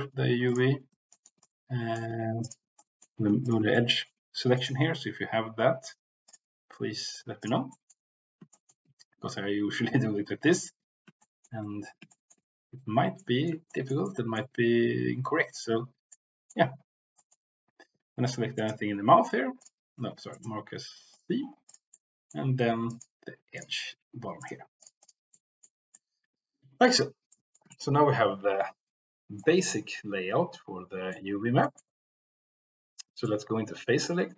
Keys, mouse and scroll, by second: 0.4 ctrl+click, 1.4 middle click, 2.3 ctrl+click, 2.8 middle click, 3.7 middle click, 4.5-6.4 right drag, 7.3 click, 7.7 middle click, 8.5 shift+middle click, 11.3 shift+middle click, 12.1 shift+middle click, 13.2 middle click, 13.7 shift+middle click, 14.0 middle click, 16.0 middle click, 17.2 middle click, 18.6-19.8 right drag, 20.1 ctrl+z, 20.5 right click, 22.0 middle click, 23.4 alt+click, 24.3 right click, 25.0 click, 25.2 middle click, 25.9 middle click, 27.4 shift+middle click, 27.7-29.5 middle drag, 30.0-31.2 middle drag, 31.6 middle click, 33.1 click.